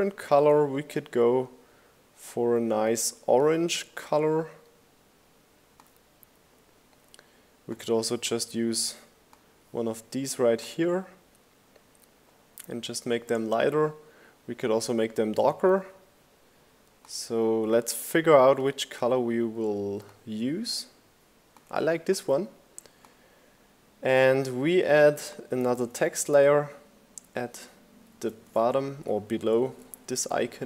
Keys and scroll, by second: 24.9 super+c, 26.6 super+v, 27.0 shift+Down, 27.3 shift+Right, 27.9 shift+Down, 28.0 shift+Right, 28.3 shift+Down, 28.4 shift+Right, 28.8 shift+Down, 29.1 shift+Right, 29.3 shift+Up, 29.5 shift+Right, 30.3 shift+Down, 30.5 Right.